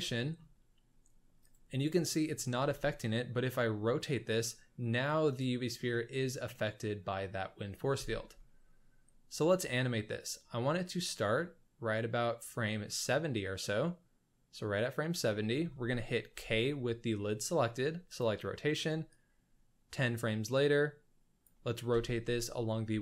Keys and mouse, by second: 0.1 shift+drag, 2.5 r, 6.4 drag, 6.6-7.7 middle drag, 7.9 space, 9.3-10.4 drag, 13.5 click, 16.3 k, 19.1 click, 21.9 r.